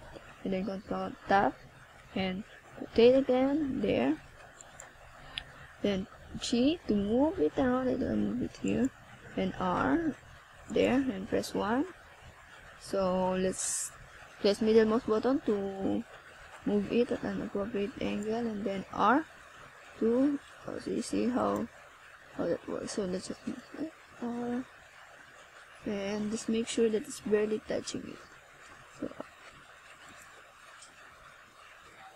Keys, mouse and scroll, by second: 0.5 click, 2.8 click, 7.2 scroll down 1, 8.2 click, 11.3 click, 13.9 click, 18.9 click, 19.8 click, 20.4 click, 22.1 click, 22.7 click, 27.7 click, 29.2 click.